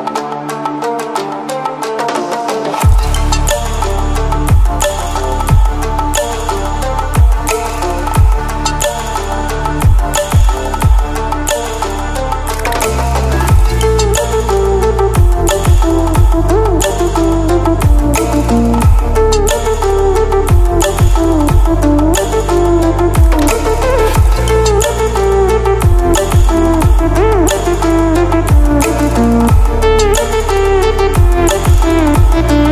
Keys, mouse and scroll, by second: 1.1-2.1 typing, 3.3-6.6 drag, 10.0-11.8 drag, 14.8 ctrl+alt+scroll down 1, 15.9 ctrl+alt+scroll up 1, 17.7 ctrl+alt+scroll up 1, 18.9-20.2 alt+click, 20.3 alt+click, 21.4 ctrl+a, 24.7 Caps_Lock, 24.8-26.7 typing, 28.1-29.5 typing, 31.1-31.8 typing, 31.4 click.